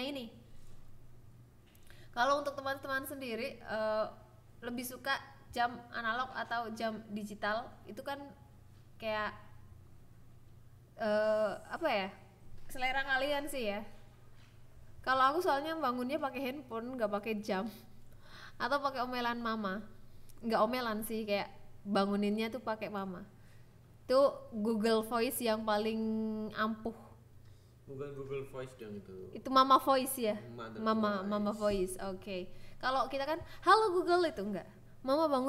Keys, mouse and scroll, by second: 0.7-2.1 drag, 3.9 click, 5.8-8.0 drag, 8.8 click, 9.7 KP_1, 11.1 click, 11.6 KP_1, 12.4 click, 14.3 click, 16.2 click, 16.7 Tab, 16.9 a, 17.5 s, 18.2 click, 18.9 alt+z, 19.1 click, 20.0 g, 20.3 z, 20.9 click, 21.6 click, 22.2 click, 22.8 g, 23.1 z, 23.7 click, 24.3 click, 24.5 Tab, 25.8 shift+s, 26.5 ctrl+right click, 27.0 ctrl+s, 27.9 click.